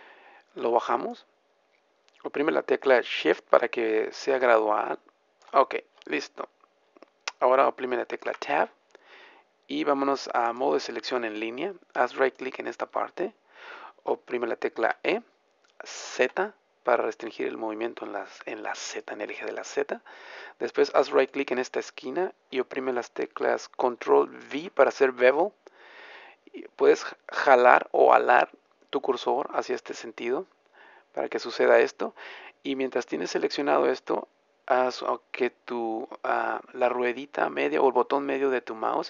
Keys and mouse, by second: 6.2-8.7 middle drag, 8.2 Tab, 14.8 e, 18.8 click, 24.7 ctrl+b.